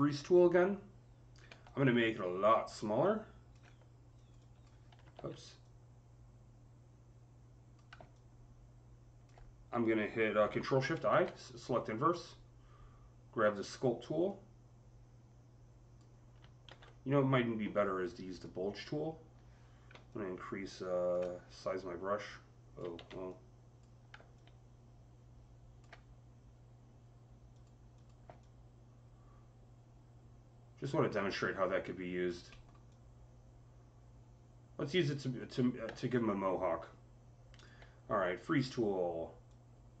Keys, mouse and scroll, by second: 1.3-2.9 typing, 1.5-2.9 drag, 4.0 click, 4.0-5.0 typing, 4.2 double click, 5.0 ctrl+z, 5.5-14.1 drag, 10.7 ctrl+shift+i, 14.1-19.7 drag, 16.5 z, 19.5-20.9 typing, 19.9-24.2 drag, 22.8 ctrl+z, 22.8 typing, 24.2-27.7 alt+drag, 26.7 typing, 27.7-32.7 alt+drag, 32.3 alt+middle click, 32.7-39.3 alt+drag, 32.7 alt+middle click, 33.1 typing, 39.3-40.0 alt+drag.